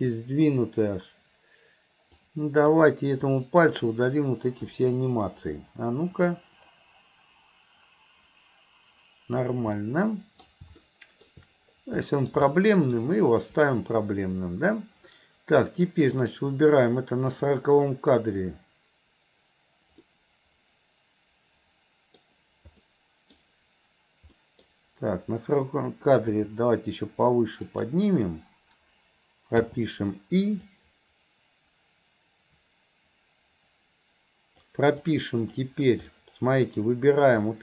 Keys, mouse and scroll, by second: 2.3 click, 3.3-3.9 drag, 6.4-9.5 drag, 9.9 middle click, 10.8-11.3 middle drag, 12.1 middle click, 12.5-13.0 middle drag, 16.2 click, 17.4 click, 20.1-22.3 middle drag, 22.9 middle click, 24.5 middle click, 30.8-34.8 drag, 35.1-35.6 drag, 36.2-36.8 middle drag, 37.5-37.6 drag.